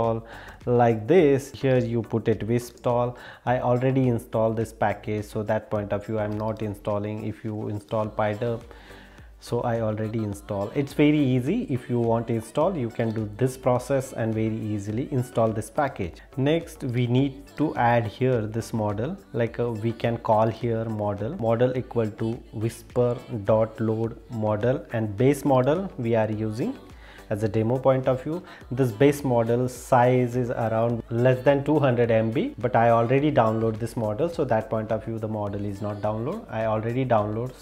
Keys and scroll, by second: 1.5 super+e, 6.5 super+e, 17.0 super+e.